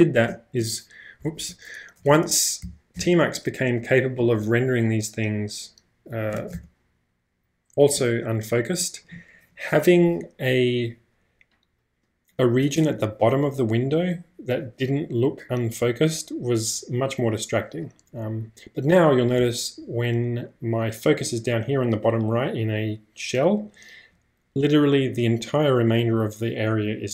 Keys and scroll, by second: 0.6 BackSpace, 1.2 Escape, 1.4 u, 2.2 ctrl+space, 2.9 ctrl+\, 6.5 ctrl+space, 6.9 -.